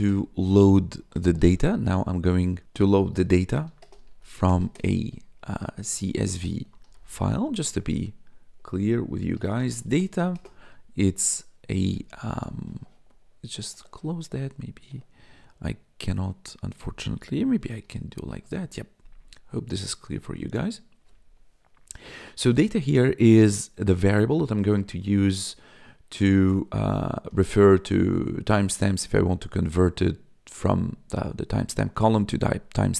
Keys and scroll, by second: 0.0-1.9 typing, 3.1-7.4 typing, 7.6 Return, 9.0-10.6 typing, 17.8 ctrl+shift+=, 20.3 ctrl+s.